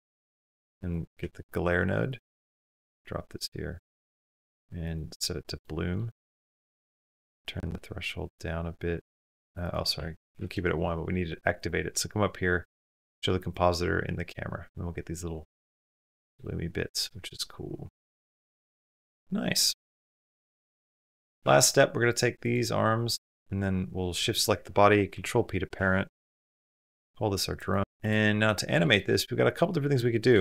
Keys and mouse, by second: 0.4 shift+a, 3.5-4.8 drag, 6.2 middle click, 7.0-9.3 drag, 9.4 click, 11.4-13.8 drag, 15.6 click, 16.3-18.3 shift+drag, 20.8 shift+click, 21.9-22.3 shift+drag, 22.8 shift+click, 24.9 ctrl+p, 26.4 click, 27.4 click.